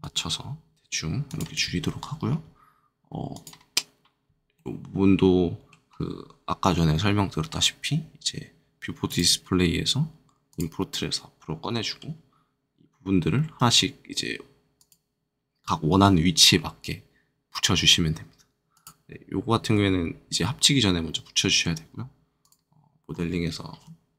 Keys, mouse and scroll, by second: 0.0 right click, 1.0 g, 1.0 z, 1.2 click, 3.3 click, 4.5 middle click, 5.8-6.2 scroll down 2, 9.0 click, 10.4 click, 10.8 middle click, 14.7 click, 18.7 click, 20.3 middle click, 22.4 click, 23.0-23.5 scroll up 1.